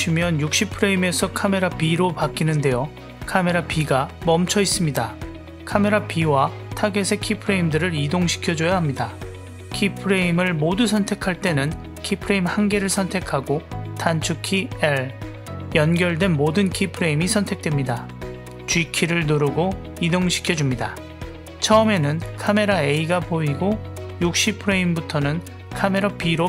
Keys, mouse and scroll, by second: 3.6 click, 4.0 click, 4.3 drag, 10.6 click, 11.7 shift+click, 14.0 l, 15.7-16.4 drag, 17.4 click, 18.4 g, 22.7-26.0 drag.